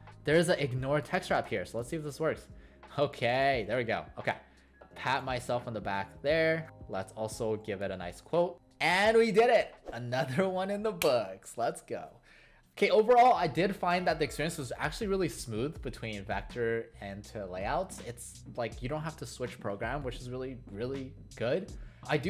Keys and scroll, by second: 3.6 ctrl+a.